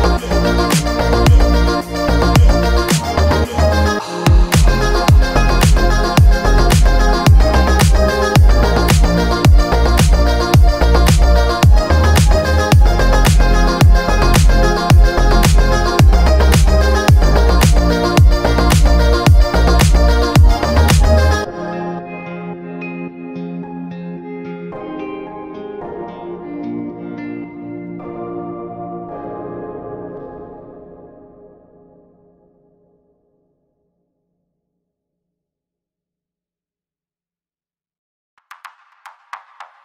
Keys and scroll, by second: 5.7 g.